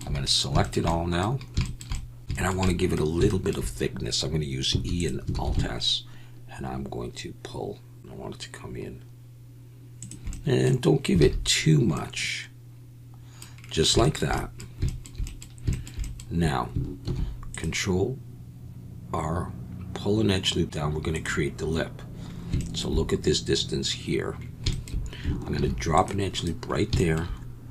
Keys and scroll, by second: 4.7 e, 5.3 alt+s, 11.2 alt+a, 17.0 ctrl+r, 25.5 ctrl+r.